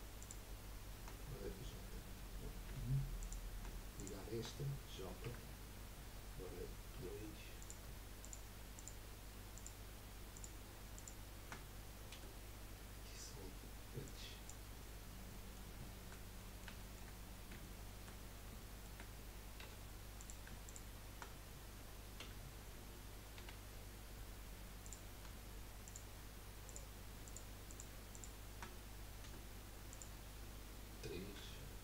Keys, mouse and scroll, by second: 0.2 shift+click, 2.7 1, 3.2 click, 3.9 shift+click, 5.2 j, 6.9 2, 7.6 click, 8.2 shift+click, 8.7 shift+click, 9.5 shift+click, 10.3 shift+click, 10.9 shift+click, 12.1 Delete, 14.9-15.3 scroll down 1, 15.3-17.2 middle drag, 17.2-17.6 scroll up 4, 17.6 shift+middle click, 18.2-18.7 scroll up 4, 18.7 shift+middle click, 19.6 1, 20.2 click, 20.6 shift+click, 22.2 j, 23.4 2, 23.8-24.8 scroll up 1, 24.8 click, 25.8 shift+click, 26.6 shift+click, 27.2 shift+click, 28.1 shift+click, 29.2 Delete, 31.3 3.